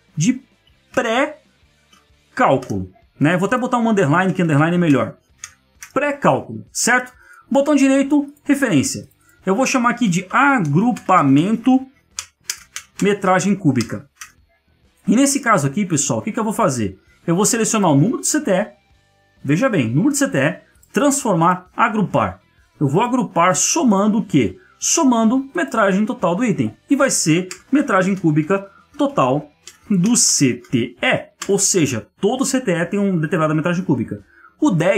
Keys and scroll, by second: 3.9 ctrl+Left, 4.2 Right.